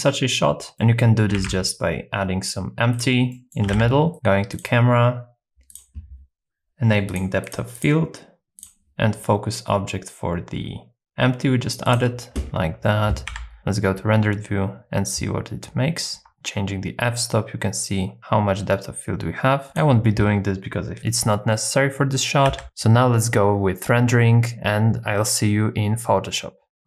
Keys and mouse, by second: 0.7 middle click, 1.3 shift+a, 3.3 middle click, 3.7 g, 3.9 z, 5.7 click, 7.1 click, 7.4 click, 7.7 click, 13.3 z, 16.3-19.8 shift+drag, 22.5 z.